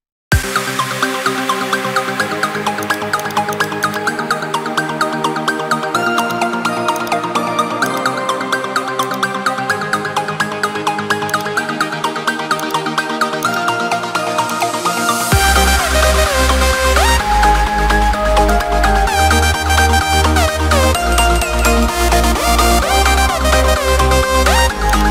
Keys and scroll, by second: 0.0 ctrl+d, 17.3 ctrl+z, 22.4 ctrl+alt+z, 22.6 ctrl+alt+z.